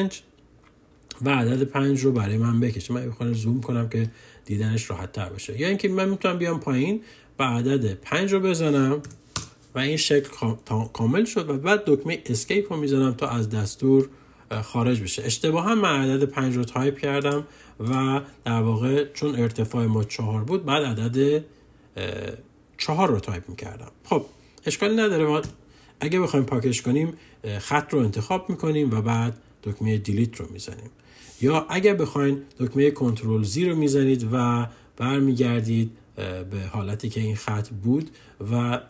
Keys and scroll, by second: 7.1 5, 8.9 Return, 11.9 Escape, 25.1 Delete, 32.6 ctrl+z.